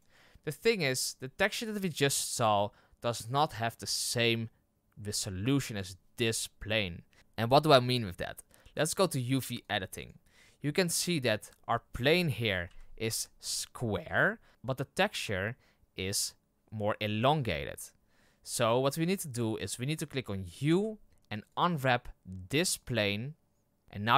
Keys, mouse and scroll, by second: 0.0 click, 9.6 click, 11.0 scroll down 5, 11.7 middle click, 12.6 KP_1, 13.3-13.8 scroll up 3, 21.5 u.